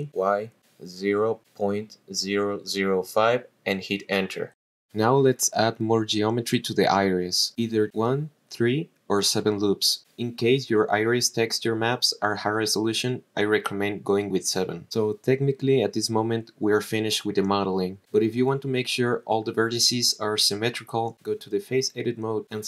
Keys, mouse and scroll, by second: 0.0-2.3 typing, 3.3 Return, 6.2 click, 7.0 shift+middle click, 7.4 middle click, 7.8-8.9 scroll up 1, 9.4 click, 10.4 click, 11.3 click, 12.1 click, 12.7 click, 13.2 click, 13.7 click, 14.4 middle click, 15.1 shift+middle click, 18.7 click, 19.7 scroll down 2, 20.3-21.1 drag, 21.5 click, 22.2 click.